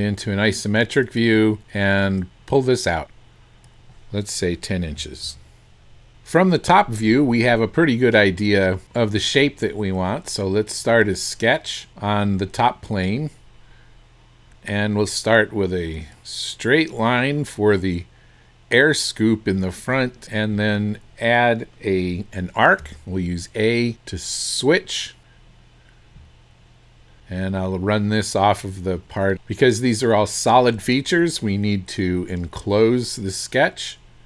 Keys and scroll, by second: 5.6 KP_1, 5.6 KP_0, 22.8 a.